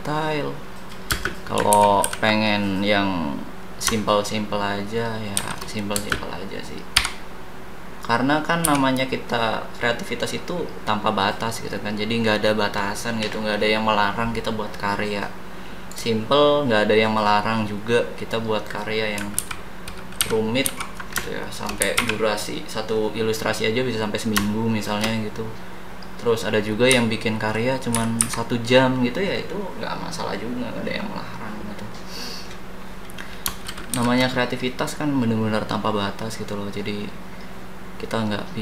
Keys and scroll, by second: 1.1 space, 1.7 ctrl+c, 2.1 ctrl+v, 5.4 shift+s, 5.9 space, 7.0 d, 19.3 ctrl+c, 20.2 ctrl+s, 20.6 ctrl+d, 21.8 c, 21.9 e, 26.9 Up, 33.9 shift+b.